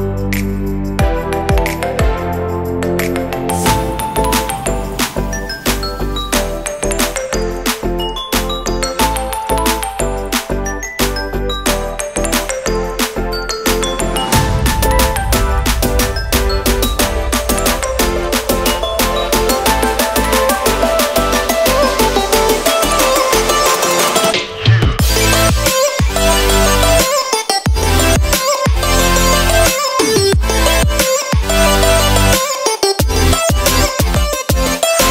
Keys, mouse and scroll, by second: 1.0 click, 2.1 shift+g, 4.0 click, 4.5 g, 7.0 click, 7.5 g, 9.0 r, 10.9 click, 11.4 g, 12.9 r, 14.2 g, 16.6 click, 17.1 shift+g, 19.2 click, 19.5 g, 25.2 click, 26.7 alt+a, 27.9 click, 28.8 click, 29.0 alt+a, 30.2 l, 32.6 middle click, 32.8 scroll, 33.7 middle click.